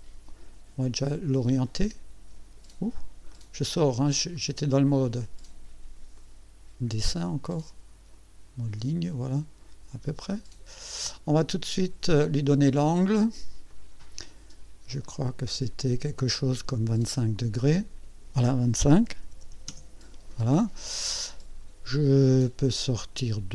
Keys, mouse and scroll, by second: 1.6 click, 3.3 right click, 4.3 right click, 5.0 click, 6.1-10.8 drag, 10.9 click, 12.1 click, 13.7 click, 15.0 click, 17.6 click, 19.2 KP_2, 19.4 KP_5, 19.7 KP_Enter, 22.1 scroll up 2.